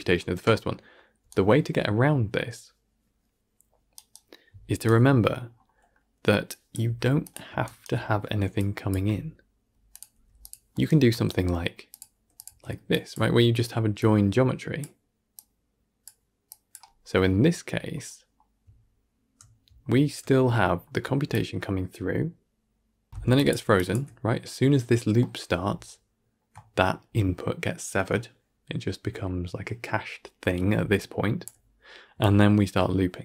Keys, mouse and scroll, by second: 1.2-6.4 right drag, 6.4 click, 7.7 ctrl+right click, 9.9 click, 11.0-11.9 ctrl+shift+right drag, 11.9 click, 12.8-14.7 drag, 15.2-15.9 drag, 16.4-18.6 drag, 18.6-19.7 alt+scroll up 1, 19.7-21.2 alt+scroll down 1, 21.2-23.1 drag, 23.1 ctrl+z, 23.2-33.2 drag.